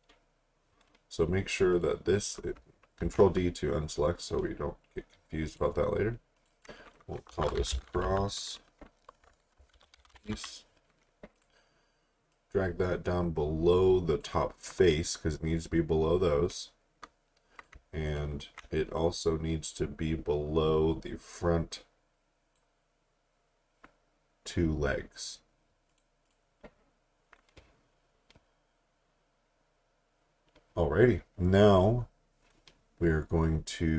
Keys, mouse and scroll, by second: 1.7 click, 3.0 d, 5.5 click, 7.1-10.8 typing, 11.4 click, 17.5 click, 18.1 click, 19.0 click, 25.9 click.